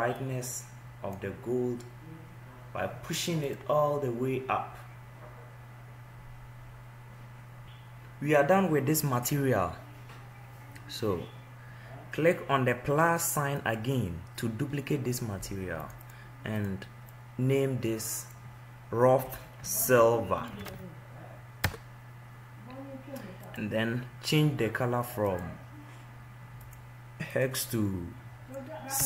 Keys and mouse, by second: 16.6 click, 19.0-22.9 drag.